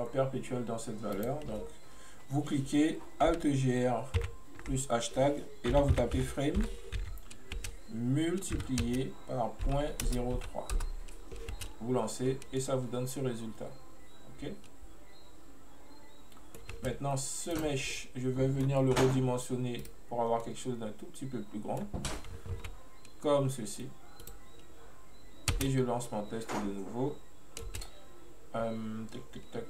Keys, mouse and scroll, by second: 1.2-4.2 drag, 12.3-12.7 scroll up 1, 12.7-15.7 middle drag, 16.6 middle click, 16.8 space, 17.6 click, 18.0-19.9 middle drag, 19.9-20.5 right drag, 20.5-22.6 middle drag, 22.6 s, 26.2-27.8 middle drag, 27.8 space.